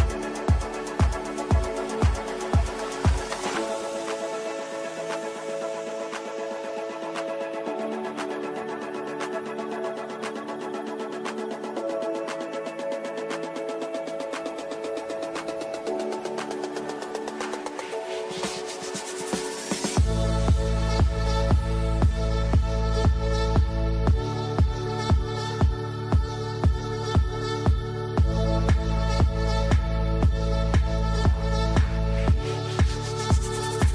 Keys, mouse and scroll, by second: 9.1 click, 12.4 click, 13.3-17.7 ctrl+drag, 17.7-22.3 ctrl+drag, 22.3 F2, 22.9-25.9 drag, 26.0-27.7 ctrl+drag, 27.7 ctrl+space, 28.2-29.0 typing, 28.2 click, 28.9-33.9 shift+drag.